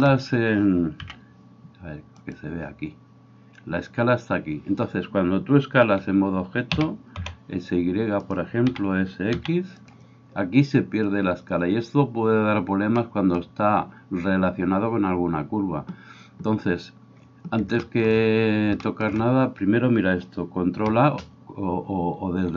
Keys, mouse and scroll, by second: 1.0 n, 2.4-22.5 middle drag, 6.8 s.